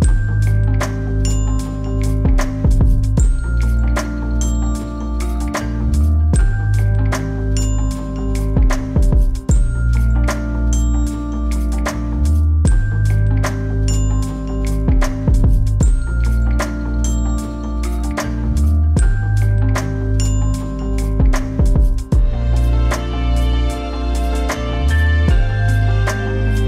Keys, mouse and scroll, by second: 0.0-0.4 typing, 0.7 Return, 2.6-5.3 drag, 6.3 typing, 6.6 Return, 8.1-24.6 drag, 25.2 1, 25.4 Return.